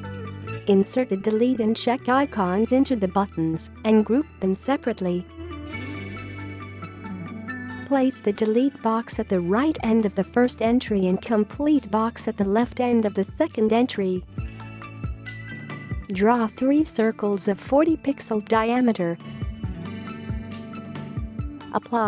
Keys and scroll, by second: 6.4 ctrl+g, 7.2 ctrl+g, 7.7 space, 18.1-18.9 typing.